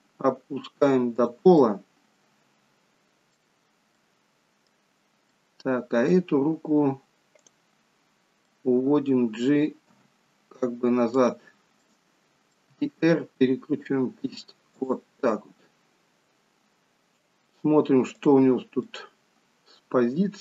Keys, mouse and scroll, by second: 1.5 middle click, 4.1 middle click, 5.4 middle click, 7.6 click, 8.1 scroll down 3, 8.6 middle click, 10.1 g, 12.0 middle click, 12.9 r, 15.3 middle click, 18.3 click, 19.0 middle click.